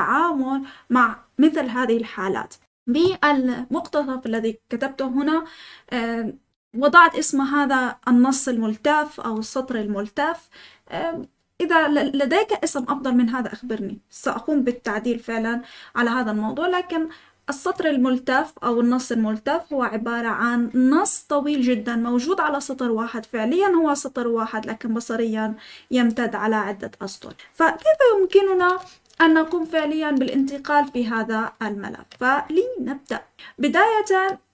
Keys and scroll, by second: 28.5 Escape, 28.9-30.9 typing.